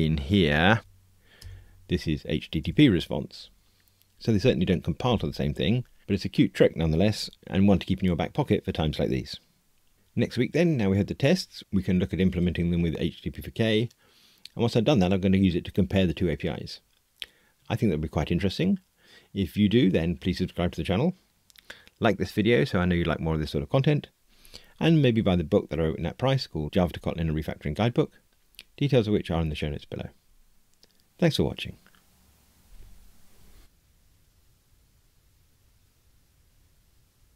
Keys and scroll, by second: 0.8 alt+Return, 2.7 Return.